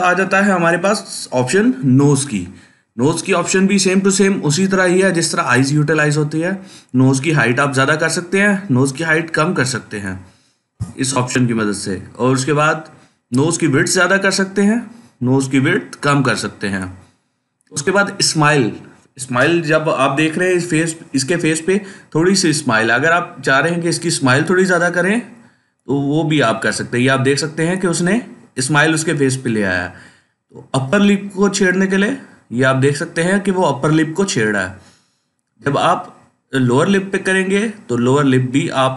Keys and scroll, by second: 2.2 typing, 10.6 0, 13.1 typing.